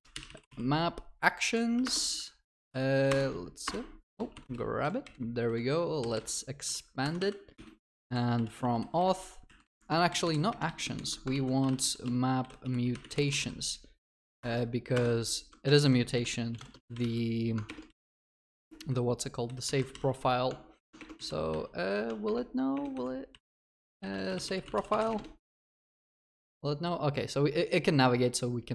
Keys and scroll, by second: 1.9 alt+Return, 8.6 Escape, 11.4 ctrl+w, 14.4 alt+Return, 17.7 ctrl+BackSpace, 28.0 ctrl+alt+Left.